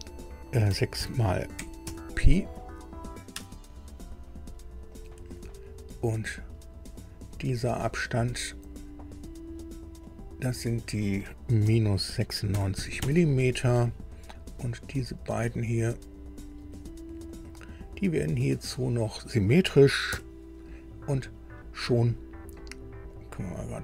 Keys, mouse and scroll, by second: 0.7-2.4 typing, 3.3 Return, 4.9 click, 7.0 click, 8.1 click, 10.1 click, 11.6 KP_Subtract, 12.5 KP_9, 12.7 KP_6, 13.0 KP_Enter, 15.1 click, 17.3 click, 18.6 click, 20.1 s, 23.1 click, 23.7 click.